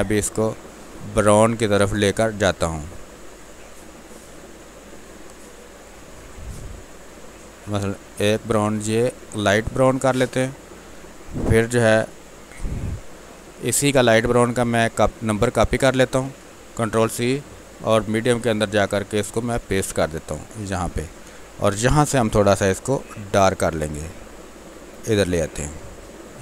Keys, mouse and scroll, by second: 10.0 Return, 11.1 click, 16.2 ctrl+c, 18.1 click, 21.2 ctrl+v, 22.8-25.3 drag, 26.0 click.